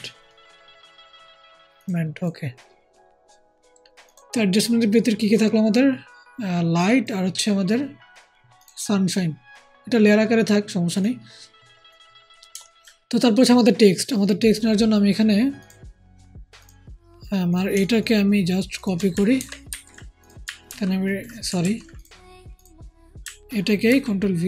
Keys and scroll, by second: 19.3 ctrl+shift+c, 20.6-21.5 typing, 23.8 ctrl+v.